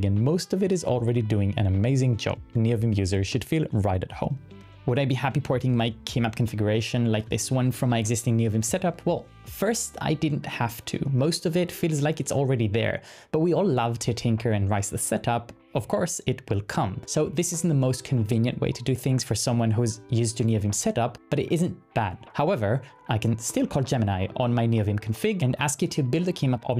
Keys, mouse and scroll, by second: 0.9-1.8 typing, 22.9-26.7 typing.